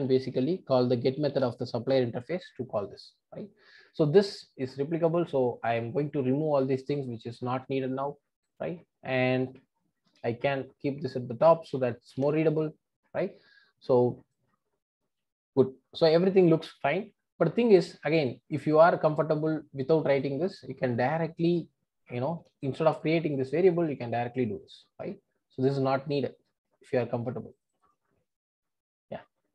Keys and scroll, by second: 10.1 super+x, 12.1 super+v, 22.4 super+x, 23.8 super+x, 24.4 super+v, 26.8 super+x, 28.0 super+x, 28.6 super+v.